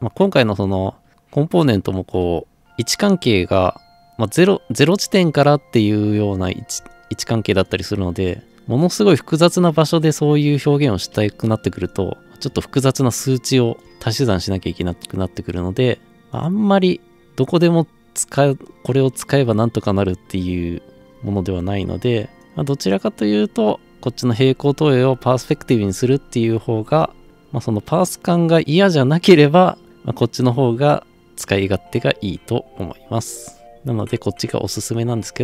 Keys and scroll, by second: 17.2 scroll up 1, 17.6 scroll down 1.